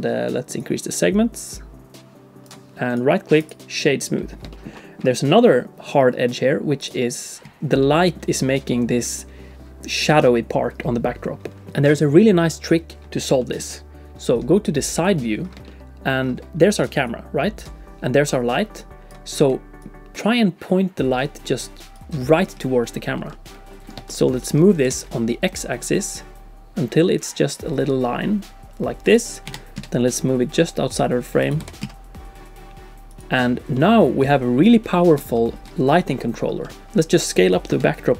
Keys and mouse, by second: 0.7-2.5 drag, 3.0 click, 3.8 click, 4.1 middle click, 4.2 click, 4.5 shift+click, 4.8 click, 7.4 d, 7.8 click, 13.4 shift+click, 15.0 click, 15.6 shift+middle click, 16.9-19.3 d, 17.1 click, 18.8 click, 19.5-22.2 d, 19.8-22.2 drag, 22.6 d, 23.2 d, 23.3 click, 24.1 shift+click, 24.4 click, 24.8 r, 29.5 g, 31.6 r, 33.7 middle click, 33.8 click, 33.9 middle click, 34.0 click, 35.3 shift+click, 36.6 middle click, 36.8 Tab, 37.7 Tab.